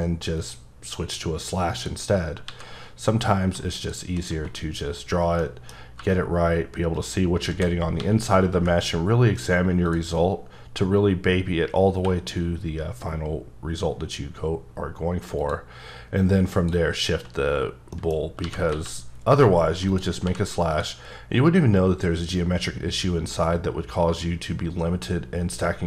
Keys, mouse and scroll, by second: 1.0 click, 2.5 x, 3.8 shift+click, 4.5-5.4 scroll up 2, 5.4 middle click, 6.0 g, 7.0 click, 7.6-8.5 typing, 9.9 click, 10.1-11.9 scroll up 3, 11.9 q, 15.5 click, 16.5 click, 17.1-17.9 scroll down 4, 17.9 middle click, 18.2 scroll up 2, 18.4 g, 18.7 x, 19.9 click, 20.2 h, 20.7 click.